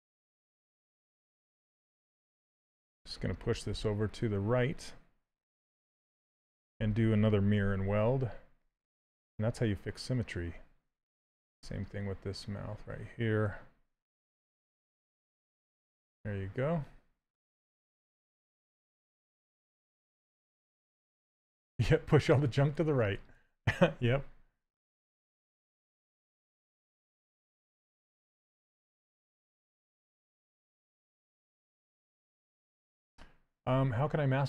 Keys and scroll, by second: 7.7 2, 13.1 2.